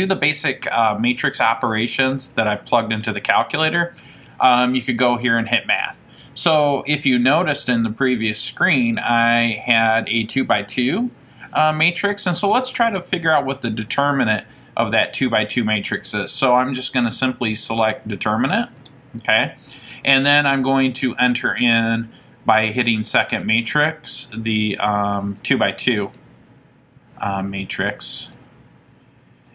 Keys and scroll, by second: 2.5 Right, 19.0 Return, 25.5 Down, 26.2 Down, 28.5 Return.